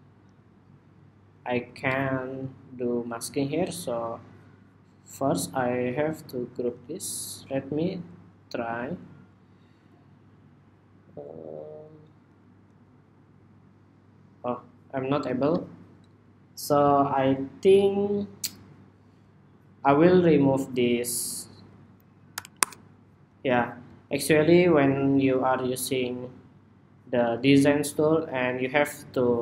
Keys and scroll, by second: 6.2 super+g, 7.5 super+g.